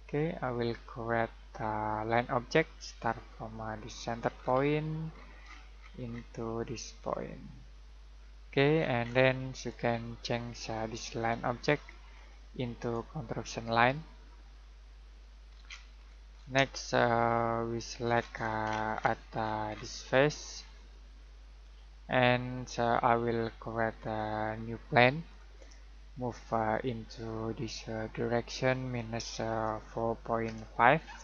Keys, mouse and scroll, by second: 4.3 scroll down 1, 7.8 click, 8.7 scroll down 1, 8.9-9.5 scroll up 1, 9.5 right click, 10.4 click, 12.8 right click, 15.1 click, 15.4 scroll down 1, 15.6-15.9 scroll up 1, 16.7 middle click, 18.1 scroll down 1, 18.3-19.3 scroll up 1, 19.3-20.6 scroll down 1, 20.7 click, 24.0 click, 30.4-31.2 typing.